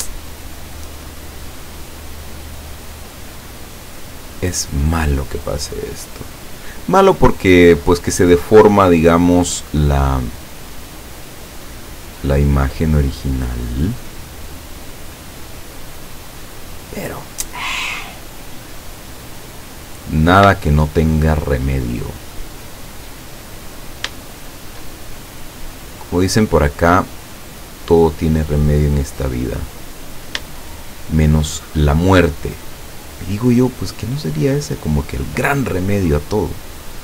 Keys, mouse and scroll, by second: 1.6 middle click, 3.2 right click, 4.6 right click, 5.4-8.0 drag, 8.2 middle click, 10.0 right click, 10.7-12.6 drag, 13.0 right click, 14.0-15.0 drag, 15.4 right click, 16.3-17.3 drag, 18.2 scroll down 1, 18.7-19.9 middle drag, 20.0-20.5 scroll up 2, 20.7-21.8 shift+middle drag, 22.5 right click, 23.2 right click, 24.2 shift+middle click, 24.7 shift+middle click, 27.5-29.2 drag, 29.3 right click, 29.8 middle click, 30.7 shift+middle click, 31.4 shift+middle click, 32.1 scroll down 2, 32.9 right click, 34.2-35.5 drag, 36.4 right click.